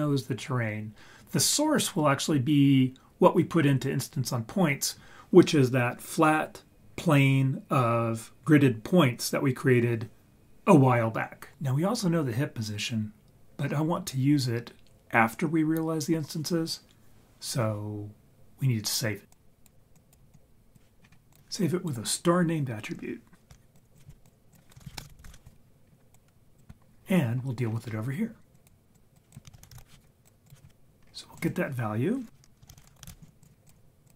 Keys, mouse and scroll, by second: 19.3 click, 19.9 click, 20.3 click, 21.0 scroll up 4, 23.4 click, 23.5 shift+d, 23.9-24.3 drag, 24.5-25.6 shift+drag, 25.6-26.1 scroll down 3, 26.1 click, 27.0 scroll down 3, 27.6-28.0 scroll up 4, 28.5 click, 28.9 click, 29.6 shift+a, 29.7 s, 31.0 scroll up 3, 31.3 click, 32.7 shift+a, 34.0-34.1 drag.